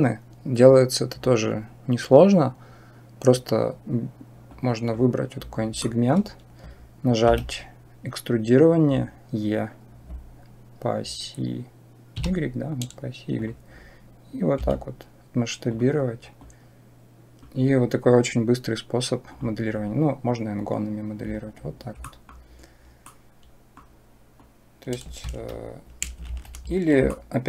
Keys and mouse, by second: 4.5 click, 5.7 shift+middle click, 7.1 e, 14.4 s, 16.4 click, 19.1 click, 21.8 middle click, 23.0 click, 24.4 click, 25.1 Escape, 26.1 ctrl+z, 27.1 shift+click.